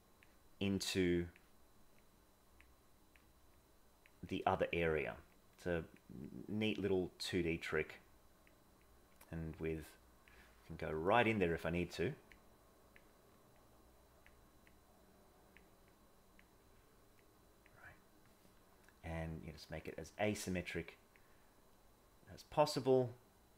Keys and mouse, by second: 0.7 click, 1.9 click, 2.8 click, 3.6 click, 4.2 click, 5.4 click, 6.2 click, 7.4 click, 7.8 click, 8.8 click, 9.8 click, 11.0 middle click, 12.3 click, 13.6 click, 14.6 click, 15.8 click, 17.3 click, 19.2 click, 20.4 click, 21.6-22.7 drag, 23.1 click.